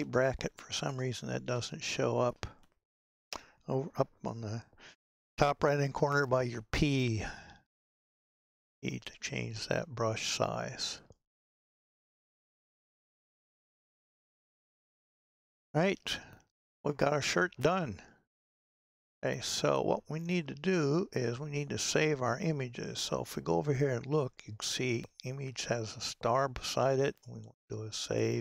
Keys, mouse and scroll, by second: 21.1 scroll up 10.